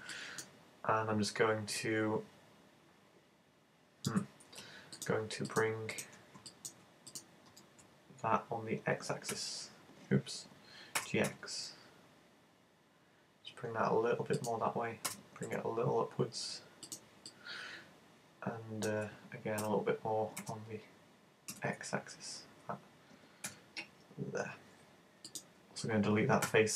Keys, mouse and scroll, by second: 0.1 shift+middle click, 0.9 scroll down 2, 1.1-1.8 scroll up 1, 1.8 middle click, 5.0 right click, 5.5 shift+right click, 6.0 shift+right click, 7.6 super+z, 9.3 x, 11.0 g, 14.5 click, 15.1 g, 16.9 click, 17.3 middle click, 19.6 f, 20.4 g, 25.4 click, 26.5 x.